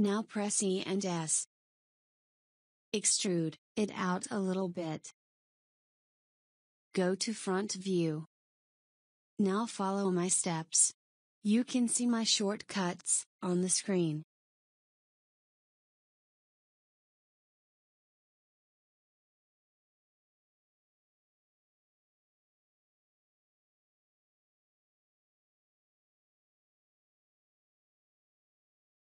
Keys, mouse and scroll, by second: 6.1 KP_1, 15.1 e, 19.2 s, 22.3 e, 26.5 s.